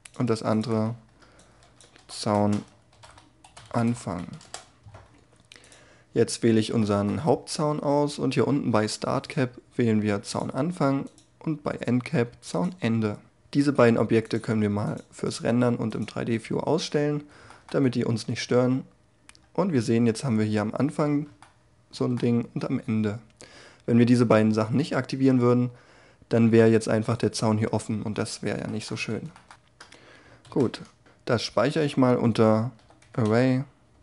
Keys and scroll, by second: 30.0 ctrl+shift+s.